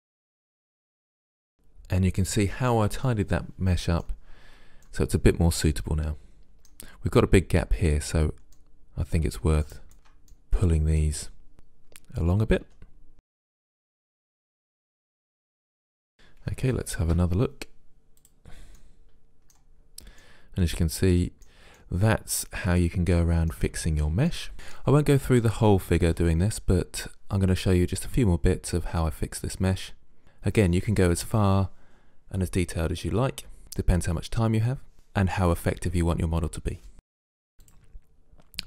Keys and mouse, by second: 0.2 Delete, 3.1-6.7 middle drag, 7.9-9.7 middle drag, 9.7 right click, 10.4 middle click, 11.5-12.7 drag, 12.7 g, 13.7-14.9 drag, 13.9-14.9 right drag, 14.0 g, 14.4 g, 14.9 g, 15.0 right click, 15.4 g, 16.5 Tab, 17.2 Tab, 18.3 click, 18.8-20.0 middle drag, 21.4-24.4 middle drag, 24.8 click, 25.5 Delete, 26.0 click, 26.9 Delete, 27.3 click, 27.6 Delete, 28.0 click, 28.8 right click, 29.0 Delete, 29.8 right click, 29.8 click, 30.0 Delete, 30.2 click, 30.8 Delete, 31.0 click, 31.4 middle click, 32.0 middle click, 32.7 middle click, 33.1 right click, 33.5 Delete, 33.9 click, 34.2 middle click, 34.4 Delete, 34.6 click, 35.1 middle click, 35.6 click, 35.9 right click, 36.0 g, 36.2 click, 36.3 right click, 36.3 g, 36.5 g, 37.0 middle click, 37.2 right click, 37.4 g.